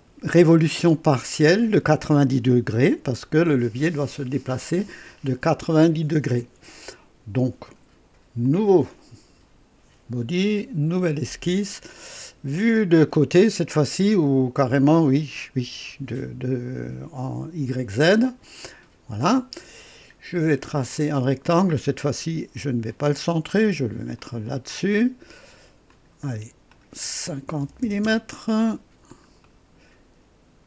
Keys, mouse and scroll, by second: 8.4 click, 10.9 click, 15.3 click, 18.2 click, 20.9 click, 22.9 click, 24.1 click, 24.7 right click, 25.9 click, 26.7 click, 27.6 KP_5, 27.8 KP_0, 28.2 Return, 29.1 scroll down 2, 29.4 right click.